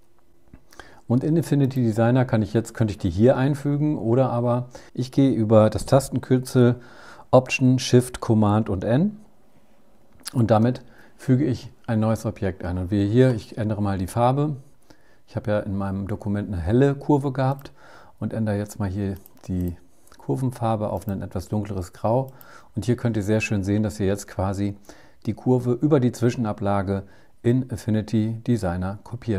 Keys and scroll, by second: 9.6 alt+shift+super+n.